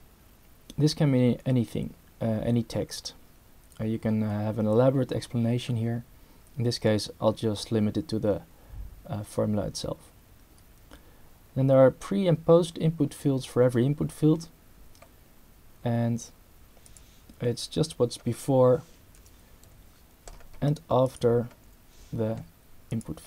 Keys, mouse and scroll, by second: 16.9 click, 17.7 v, 19.2 BackSpace, 19.6 =, 21.0 click, 22.9 click.